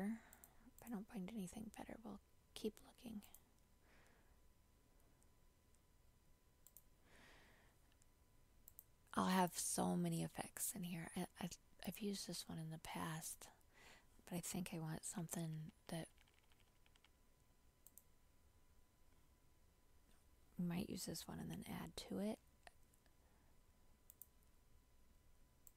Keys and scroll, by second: 22.3 ctrl+j.